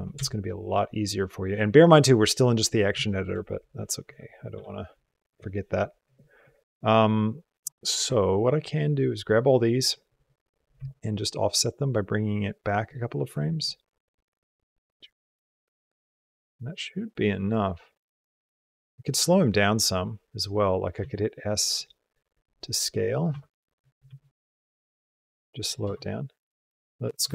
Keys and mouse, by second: 0.1 shift+click, 3.0 shift+click, 4.3 b, 10.6 g, 13.5-20.3 drag, 22.3 s, 25.7 space.